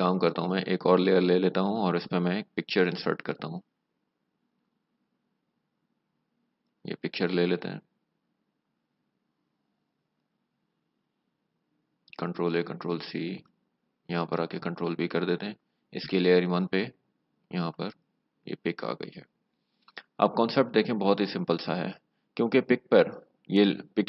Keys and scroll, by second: 12.3 ctrl+a, 12.6 ctrl+c, 14.4 ctrl+v, 15.5 v, 18.4-19.6 typing, 21.7 v.